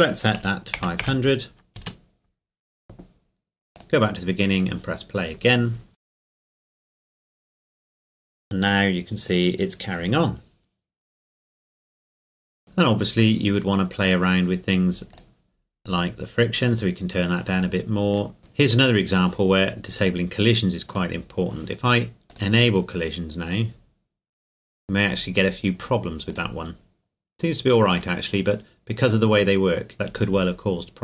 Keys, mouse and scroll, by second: 0.4 KP_5, 0.8 KP_0, 1.8 KP_Enter, 3.8 click, 13.2 click, 14.0 right click, 15.1 click, 18.1 right click, 18.5 right click, 18.5 scroll up 1, 20.9-24.7 drag, 24.7-25.9 scroll down 2, 26.3 right click, 29.9 scroll down 1.